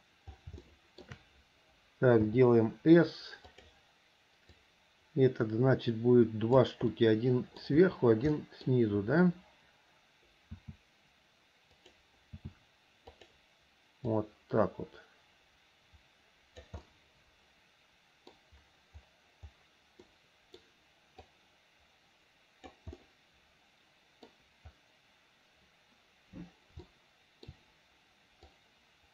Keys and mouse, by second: 0.8 shift+middle click, 2.4 s, 4.8-6.8 drag, 7.1 middle click, 8.5 middle click, 10.6 s, 12.5 s, 14.4-16.8 drag, 17.0-18.5 middle drag, 20.2 middle click, 21.5-22.9 drag, 23.1-24.4 middle drag, 27.0 shift+middle click, 28.6-29.1 drag.